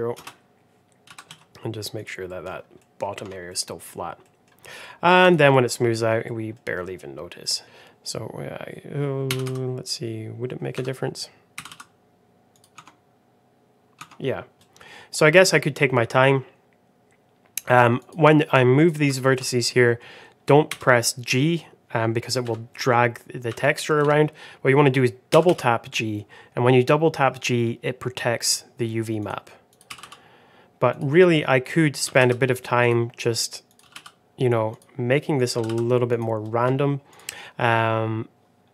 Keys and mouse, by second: 1.0 g, 2.2 middle click, 2.7 middle click, 3.7 Tab, 4.1 middle drag, 4.7 middle click, 5.1 click, 5.4 middle click, 6.2 middle click, 6.9 middle click, 7.6 Tab, 7.6 1, 7.6 g, 11.5 g, 13.2 Tab, 13.9 Tab, 14.5 middle click, 15.4-16.9 drag, 17.9 click, 18.4 middle click, 19.0 shift+middle click, 19.7 middle click, 20.6 g, 22.6 middle click, 23.4 g, 25.2 g, 29.8 g, 32.0 g, 33.9 g, 35.3 click, 35.5 g, 37.1 click.